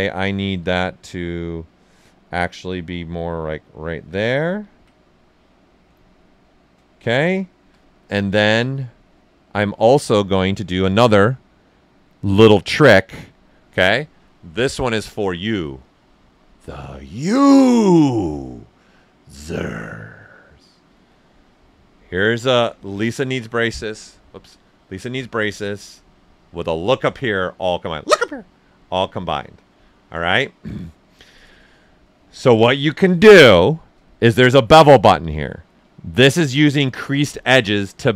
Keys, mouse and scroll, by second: 0.5 w, 1.9-3.9 drag, 3.9 q, 4.4 ctrl+right click, 4.9 right click, 5.8 right click, 7.0 alt+right click, 7.9 ctrl+right click, 8.9-10.3 ctrl+right drag, 10.3-12.5 drag, 12.5 click, 14.6 typing, 26.6 1.